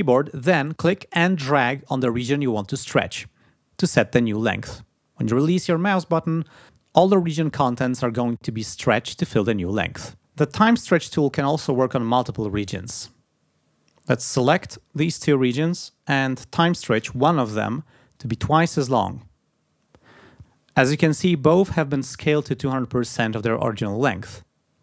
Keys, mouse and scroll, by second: 0.0-4.8 drag, 14.4 g, 14.7 click, 16.9 t, 18.1-19.3 drag.